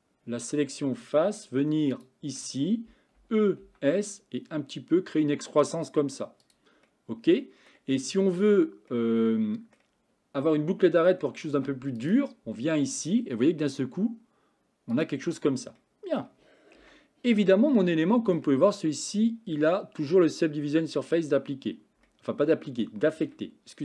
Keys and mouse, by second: 3.3 e, 6.9 middle click, 8.9 middle click, 11.5 ctrl+r, 15.8 middle click, 16.8 Tab, 17.8 shift+middle click, 22.1-23.3 shift+right drag.